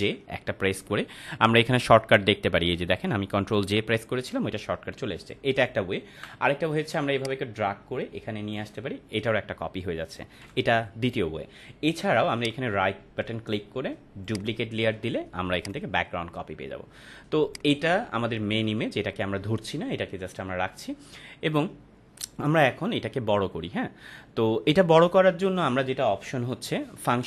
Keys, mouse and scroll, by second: 6.1 Delete, 7.2-8.7 drag, 10.4 Delete, 12.3 right click, 14.2 click.